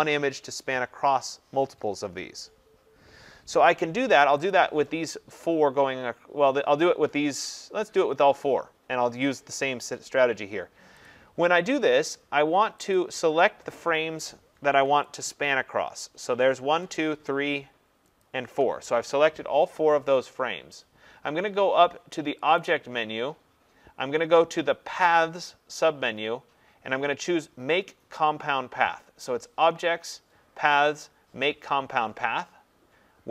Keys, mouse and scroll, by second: 4.5 click, 11.1 click, 13.0 click, 15.2 shift+click, 17.0 click, 18.2 shift+click, 24.5 click.